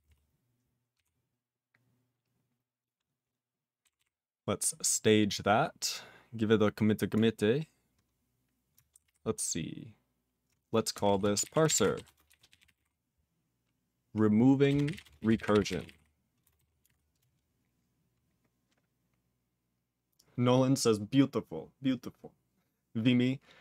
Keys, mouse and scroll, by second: 2.6 s, 4.4 c.